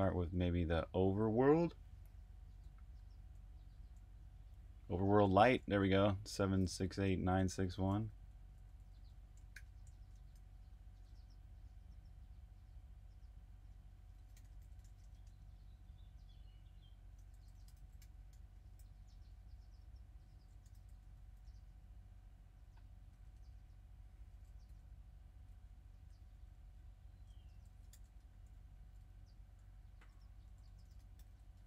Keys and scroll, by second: 0.0-0.1 typing, 1.8-7.8 typing, 9.5-11.9 typing, 13.7-15.7 typing, 16.9-18.8 typing, 20.6-21.2 typing, 23.0-23.6 typing, 25.0-25.7 typing, 26.6 super+v, 27.3-31.6 typing.